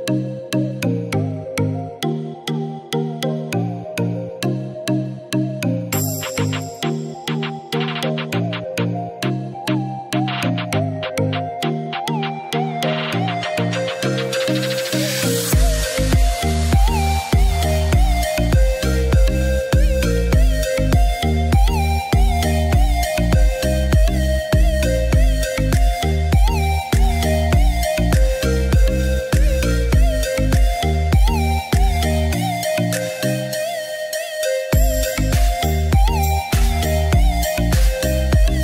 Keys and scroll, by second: 13.4 ctrl+z.